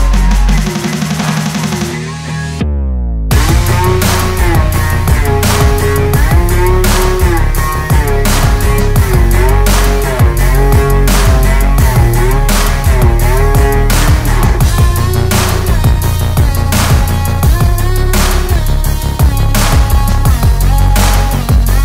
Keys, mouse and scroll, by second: 0.2 alt+s, 1.9 ctrl+click, 4.4-5.9 drag, 6.4 click, 6.8 alt+s, 8.2 click, 8.3 shift+right click, 8.5-9.8 typing, 9.1 click, 10.0-10.6 scroll down 4, 10.7 click, 11.2 click, 11.4 BackSpace, 11.6 g, 12.0 KP_Decimal, 12.1 scroll down 4, 12.3 g, 12.5 click, 14.4 click, 16.2 alt+a, 16.8 click, 17.0 click, 18.0 scroll up 3, 18.1 click, 18.3-18.7 scroll down 4, 18.7 click, 19.0 ctrl+s, 19.7 scroll down 4, 19.9 ctrl+s, 20.0 click, 20.5 shift+d, 20.7 s, 21.3 scroll up 2, 21.4 KP_7, 21.6 click.